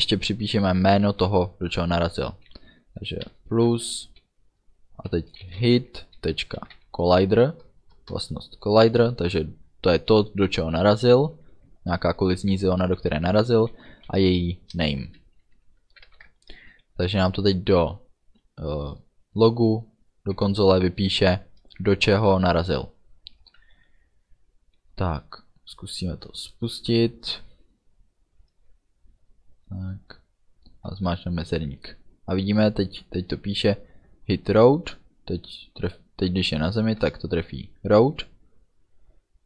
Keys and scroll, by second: 1.2 space, 3.6 KP_Add, 3.8 space, 5.5 h, 5.6 i, 8.0 Return, 8.9 ., 13.9 n, 14.1 a, 14.8 Return, 15.6 End, 16.1 ctrl+s, 31.0 space, 33.1 space, 37.1 space.